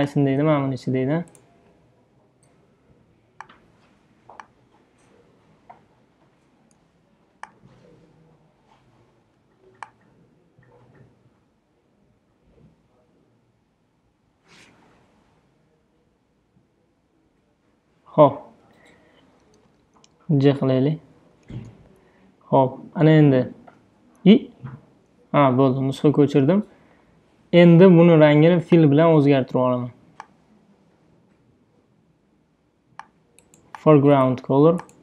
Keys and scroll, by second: 25.0-28.5 typing.